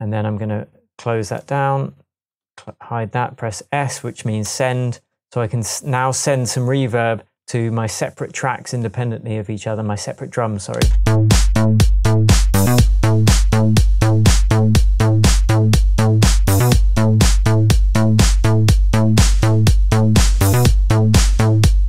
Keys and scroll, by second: 10.8 space.